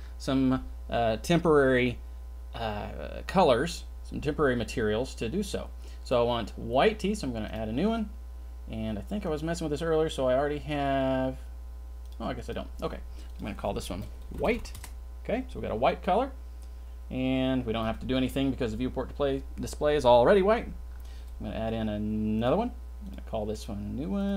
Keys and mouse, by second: 7.5 drag, 9.2-12.0 drag, 13.4-14.7 drag, 22.3 drag, 23.0 click, 23.6 click, 24.2-24.3 drag.